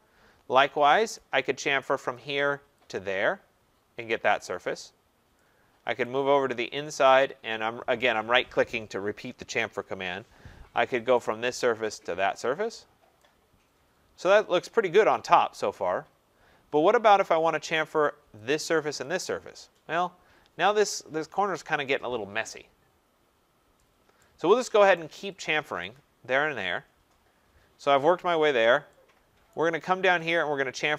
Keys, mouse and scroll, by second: 0.8 middle click, 1.2 right click, 2.1 click, 2.9 click, 6.1 right click, 7.1 right click, 11.3 click, 12.0 click, 12.7 scroll, 14.3 right click, 15.0 scroll, 16.2 scroll, 17.0 scroll, 18.0 right click, 18.5 click, 19.0 click, 19.8 middle click, 19.9 middle click, 23.0 middle click, 23.1 middle click, 23.7 scroll, 24.2 right click, 24.9 right click, 25.4 click, 25.9 click, 26.9-27.5 scroll, 28.4 scroll, 29.5 right click, 30.3 right click, 30.8 click.